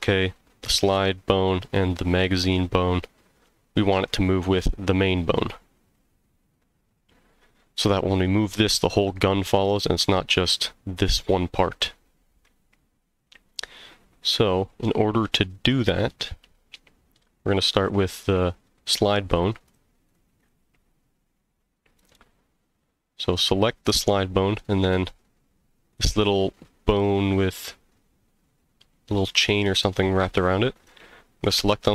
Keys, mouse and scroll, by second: 4.7 g, 6.8 click, 6.8 right click, 8.2 g, 9.7 click, 9.7 right click, 10.0 g, 11.7 right click, 18.2 click, 19.6 click, 20.0 click, 20.4 click, 22.0 click, 30.7 click.